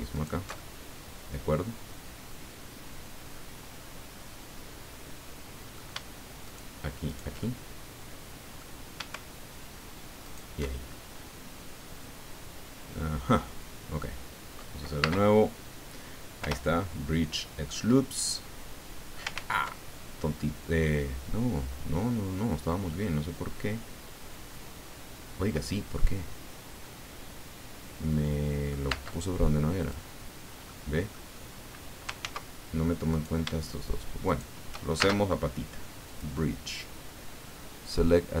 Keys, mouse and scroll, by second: 0.1 alt+shift+right click, 0.5-2.7 alt+shift+drag, 2.7-5.9 middle drag, 6.4 shift+right click, 7.1 shift+right click, 7.6-8.8 shift+right drag, 10.2 right click, 10.6-13.7 middle drag, 11.0 alt+shift+click, 13.7-14.8 drag, 15.0 space, 16.4 Return, 17.7 click, 17.8-19.3 middle drag, 19.3 ctrl+z, 20.4-22.8 middle drag, 22.9-28.8 middle drag, 28.8 space, 29.8 click, 30.7 click, 32.2 ctrl+z, 33.1 right click, 34.3 shift+right click, 34.9 shift+space, 36.1 click.